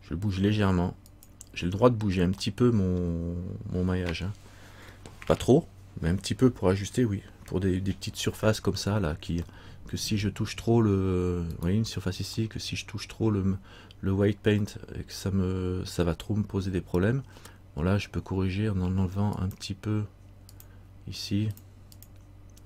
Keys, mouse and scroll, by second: 2.6 middle click, 9.7 middle click, 10.9-11.7 scroll up 2, 11.7 right click, 12.6 middle click, 14.8 middle click, 16.2 middle click, 19.5 click, 21.7-22.6 click.